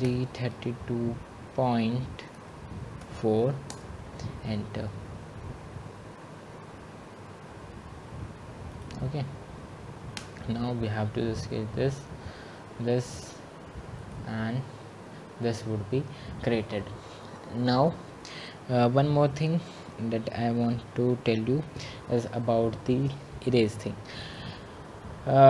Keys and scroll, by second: 4.0 typing, 10.4 Return.